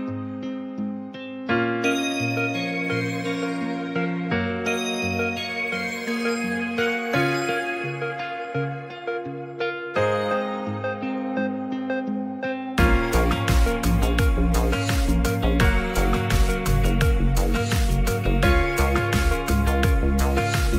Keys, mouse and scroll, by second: 0.8 click, 1.6 click, 3.1-4.3 shift+drag, 4.9 click, 5.1 click, 7.0 shift+click, 7.7-10.1 shift+drag, 10.9 middle click, 11.7 Tab, 12.8 shift+middle click, 14.1-14.6 drag, 14.8 Tab, 15.7-16.1 drag, 16.4 click, 16.9 click, 17.2 click, 17.9 Tab, 19.3 click, 20.1 2.